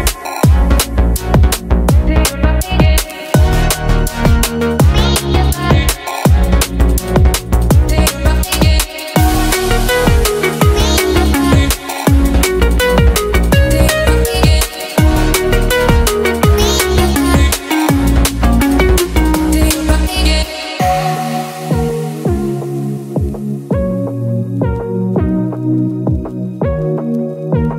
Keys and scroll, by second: 4.5 Caps_Lock, 5.6 m, 5.6 BackSpace, 6.3 Caps_Lock, 6.7 m, 7.0 o, 19.2 t.